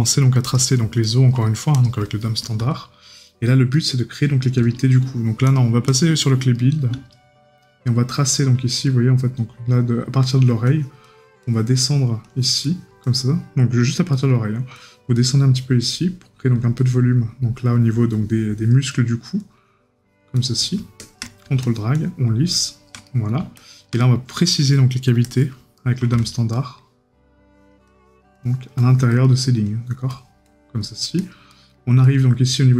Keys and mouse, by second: 1.0 right click, 6.5 right click, 14.1 right click, 18.9 right click, 23.1 right click, 25.8 right click, 29.2 right click, 31.5 right click.